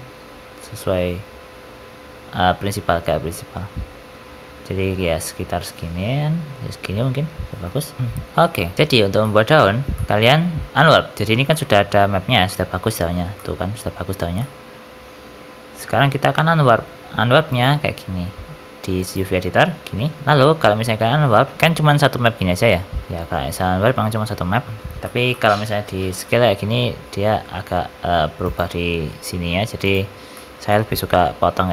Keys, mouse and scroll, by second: 7.5 middle click, 7.7 scroll down 3, 8.0 shift+middle click, 8.0-8.7 scroll up 3, 8.3 shift+middle click, 8.7 middle click, 8.9 shift+middle click, 8.9 scroll down 3, 9.1 middle click, 9.4 scroll up 1, 9.8 shift+middle click, 10.1 Tab, 10.7 middle click, 11.1 scroll down 3, 11.4 shift+middle click, 11.8 Tab, 12.3 middle click, 12.7 scroll up 4, 13.3 middle click, 13.7 scroll up 2, 14.3 middle click, 16.6 scroll down 5, 17.4 click, 20.2 Tab, 20.2-20.9 scroll up 1, 20.9-21.5 scroll down 6, 21.4 a, 21.5 scroll up 2, 21.6 g, 24.6 shift+middle click, 24.9 shift+middle click, 25.2 middle click, 26.5 s, 29.2 s, 30.2 shift+middle click, 30.6 middle click, 31.5 ctrl+r.